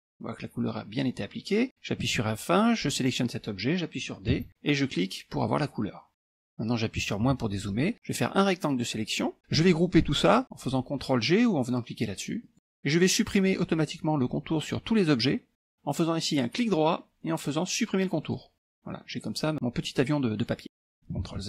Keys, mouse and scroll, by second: 2.1 F1, 3.0 click, 4.4 d, 5.0 click, 6.3 F1, 7.0 KP_Subtract, 7.6 KP_Subtract, 8.2-9.4 drag, 12.5 click, 18.3 click, 18.9 click, 19.9 click, 20.7 ctrl+z, 21.3 ctrl+z.